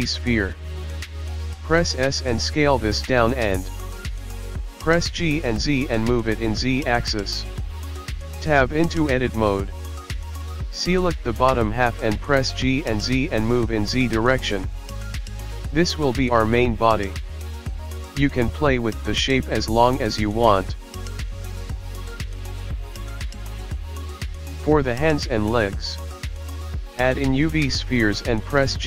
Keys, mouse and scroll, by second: 1.0 s, 2.3 g, 3.2 shift+middle click, 3.5-4.1 scroll up 1, 4.1 s, 5.2 Tab, 5.4 click, 6.5 click, 7.9 g, 9.2 click, 10.4 click, 11.1 click, 11.4 s, 12.8 s, 16.4 click, 16.6-18.2 scroll up 1, 20.6 shift+a, 21.8 scroll down 5, 22.1 s, 23.0 g, 24.0 scroll up 10, 24.3 s, 25.9 r, 27.8 g.